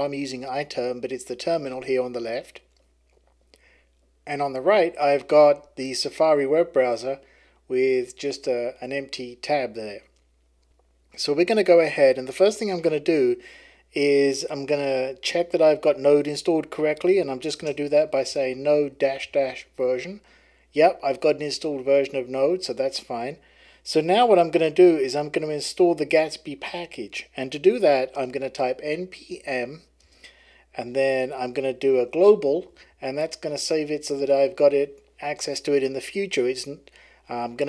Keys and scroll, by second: 16.7-19.8 typing, 20.9 typing, 28.1-34.1 typing, 35.6 typing.